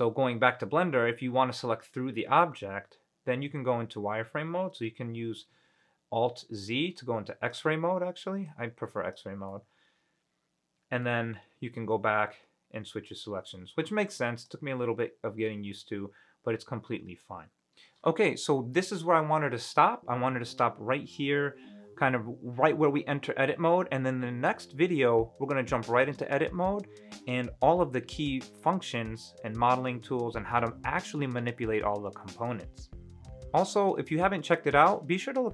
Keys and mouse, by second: 1.1-2.4 middle drag, 5.7 alt+z, 7.1 click, 8.8 click, 9.7-11.2 middle drag, 11.4 alt+z, 11.9-13.6 middle drag, 14.3 click, 15.2-17.4 middle drag, 34.8 middle click.